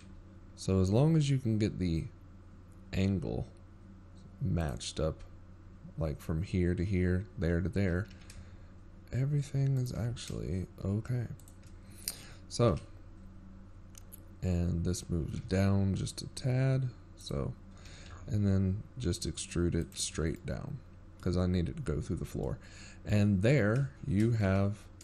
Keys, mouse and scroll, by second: 1.6 KP_7, 4.5 e, 17.6 KP_1, 20.1 g.